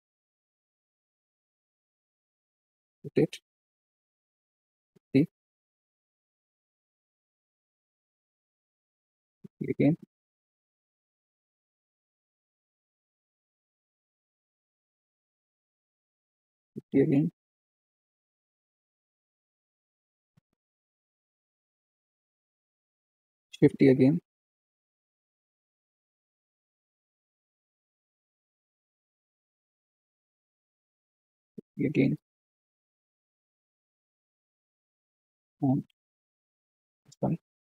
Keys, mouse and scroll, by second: 1.6 r, 4.0 click, 4.7 shift+d, 6.0 r, 9.2 shift+d, 11.4 r, 15.0 r, 16.5 shift+d, 18.7 r, 23.6 shift+d, 25.0 r, 28.9 r, 31.1 shift+d, 33.2 r, 35.1 shift+d.